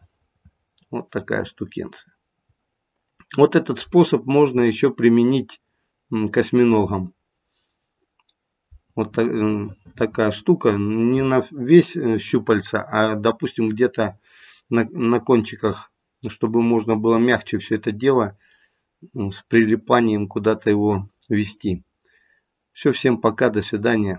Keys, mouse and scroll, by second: 2.5-24.1 scroll up 2.